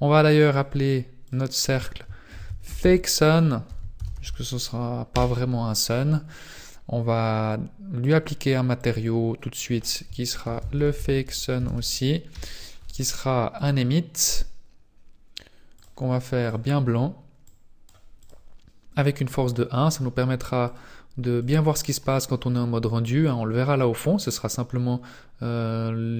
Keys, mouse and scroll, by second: 0.5 click, 1.2 click, 8.0 click, 8.8 click, 8.9 click, 9.6 click, 12.3 click, 13.5 click, 16.1 click, 16.4 click, 17.6 click, 18.2 click, 19.7-20.1 scroll down 2, 20.6 click, 21.6 scroll down 1, 24.0 scroll down 1, 25.0-26.1 scroll down 1.